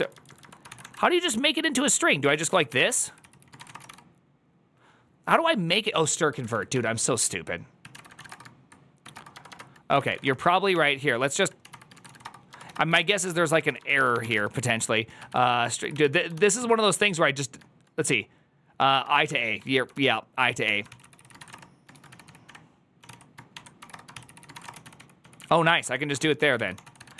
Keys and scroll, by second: 23.0-23.7 typing, 25.8-27.1 typing.